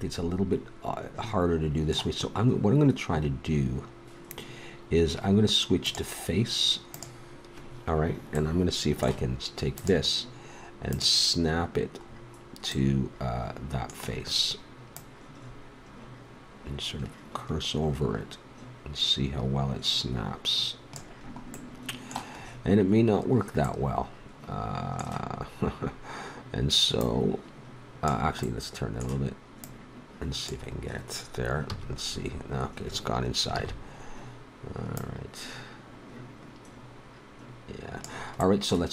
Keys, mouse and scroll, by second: 5.8-7.7 drag, 8.5 middle click, 9.8-10.9 right drag, 10.9-12.6 drag, 12.6 middle click, 13.1-14.9 middle drag, 14.9-16.9 drag, 21.2-24.5 middle drag, 27.0-28.4 drag, 28.4 middle click, 29.6 click, 29.8 middle click, 30.4-31.5 drag, 31.7 a, 32.1 middle click, 33.5 ctrl+z, 38.4 middle click.